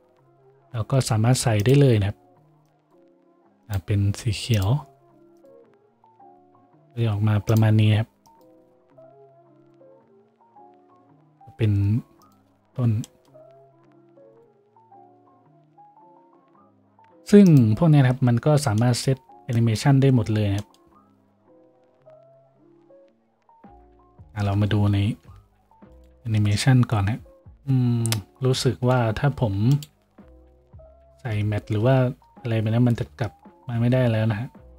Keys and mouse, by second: 6.1-12.8 middle drag, 6.1 a, 12.8-18.4 drag, 12.8 a, 18.4-27.5 middle drag, 18.4 a, 22.9 z, 24.5 F6, 25.2 F6, 26.2 F6, 27.2 F6, 27.4 F7, 27.5 F8, 29.2 F4, 30.5 F5, 30.9 F6, 33.0 F6, 33.9 F6.